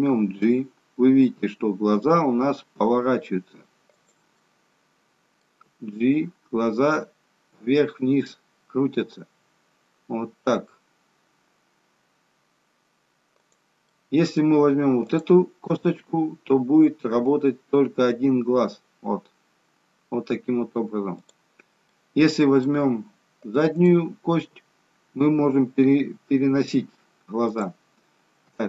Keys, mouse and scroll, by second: 4.5 middle click, 5.9 g, 13.9 middle click, 15.1 click, 15.7 g, 21.9 middle click, 22.8-23.8 scroll down 1, 23.8 click, 24.4 g.